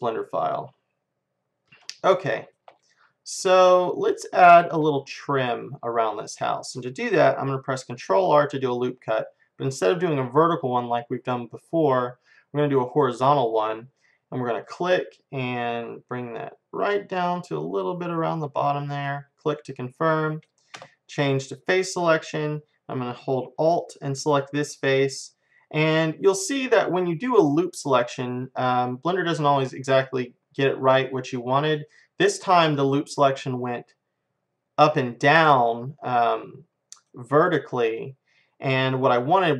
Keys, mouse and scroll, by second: 0.0-1.6 drag, 1.6-6.0 middle drag, 8.1 ctrl+r, 19.6-23.0 middle drag, 20.8 space, 24.4-26.4 drag, 26.4-27.5 middle drag, 28.7-30.7 middle drag, 35.0-39.5 middle drag.